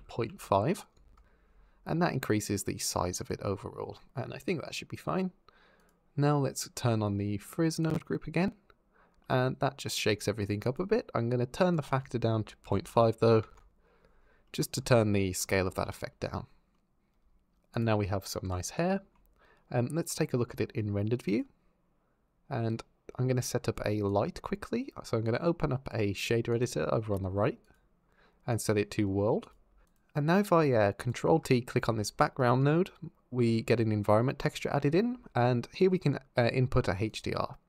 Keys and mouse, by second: 5.6 click, 9.0 click, 10.5 click, 11.6-13.7 drag, 14.3 drag, 17.5 click, 18.7 shift+drag, 20.1 z, 23.9 click, 26.3-27.5 drag, 28.3-29.3 drag, 29.8 n, 30.8 click, 31.5 ctrl+t, 32.0 click, 36.9 click.